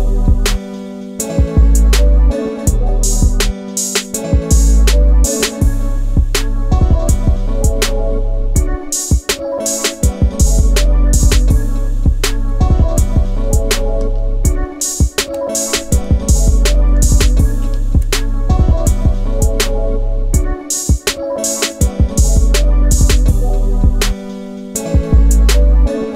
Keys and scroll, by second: 12.8-17.7 typing.